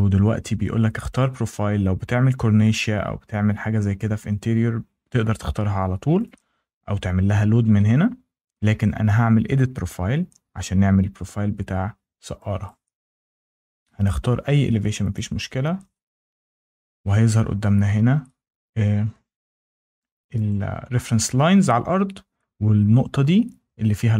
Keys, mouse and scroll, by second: 1.1 click, 2.1-2.6 scroll, 4.6 scroll, 6.1 click, 10.7 click, 12.5 click, 15.0 click, 16.7-17.5 scroll, 20.2 scroll, 20.4 click, 23.0 scroll.